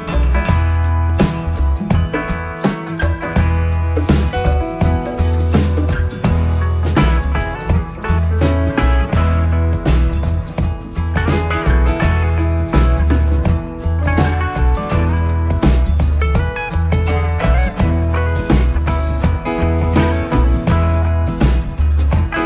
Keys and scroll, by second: 9.4 Up, 11.8 Right.